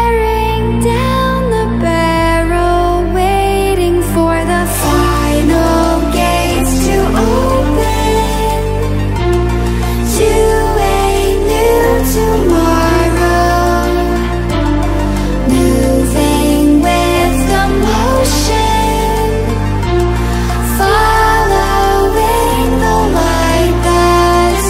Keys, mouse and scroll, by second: 1.5 click, 5.5 click, 11.9-12.5 drag.